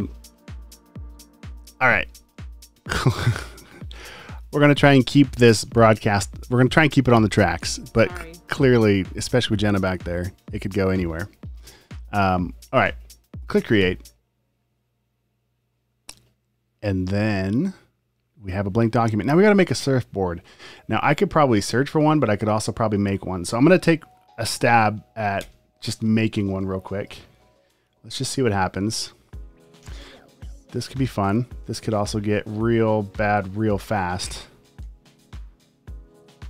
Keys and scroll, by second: 25.4 m, 29.8 p, 31.4-32.1 typing, 34.8 p.